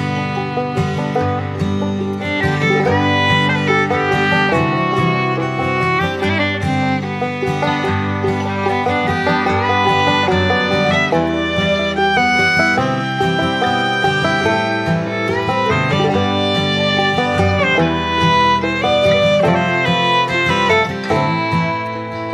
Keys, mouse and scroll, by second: 3.5 right click, 8.9 ctrl+click, 10.8 ctrl+w, 11.5 ctrl+shift+click, 12.1 ctrl+z, 13.1 ctrl+shift+click, 13.4 ctrl+click, 13.6 ctrl+shift+click, 14.3 ctrl+shift+z, 14.7 ctrl+shift+click.